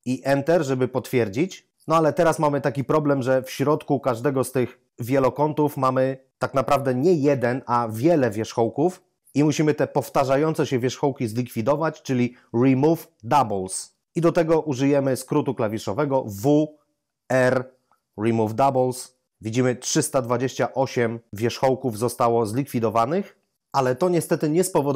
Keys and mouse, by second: 16.4 w, 17.3 r.